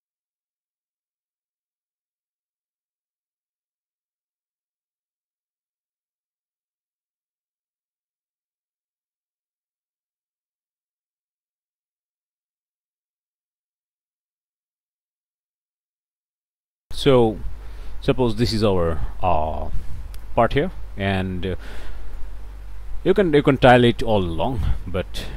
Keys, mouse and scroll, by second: 0.8 right click, 1.1 click, 1.5 right click, 1.7 middle click, 2.2 click, 2.5 right click, 2.9 middle click, 3.0 click, 3.1 middle click, 3.8 click, 4.7 click, 5.4 middle click, 6.0 middle click, 6.7 middle click, 8.6 click, 9.9 click, 12.9 click, 13.6 click, 14.0 click, 15.1 click, 15.5 right click, 15.8 click, 18.1-20.5 right drag, 21.1-22.4 right drag, 22.6 middle click, 23.3 right click, 24.5-25.3 drag.